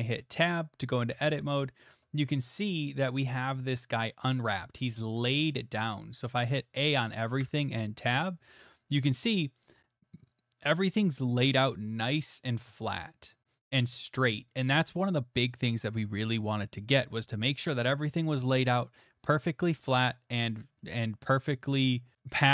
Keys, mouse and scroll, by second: 0.9 middle click, 0.9 middle click, 3.9 middle click, 4.4 shift+middle click, 4.7 middle click, 4.9 shift+middle click, 5.2 middle click, 5.8 Tab, 6.1 middle click, 6.2 middle click, 6.2 middle click, 7.0 a, 7.4 Tab, 11.7 middle click, 11.7 middle click, 11.8 middle click, 11.9 middle click, 13.4 middle click, 20.8-22.1 scroll, 22.1-22.5 scroll.